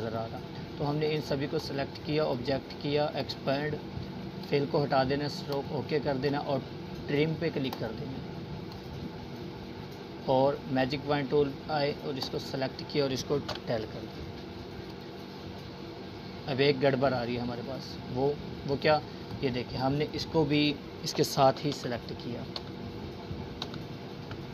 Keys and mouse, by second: 7.9 Delete, 9.4 click, 13.8 click, 15.9 ctrl+z, 19.8 click, 23.5 right click, 24.1 click.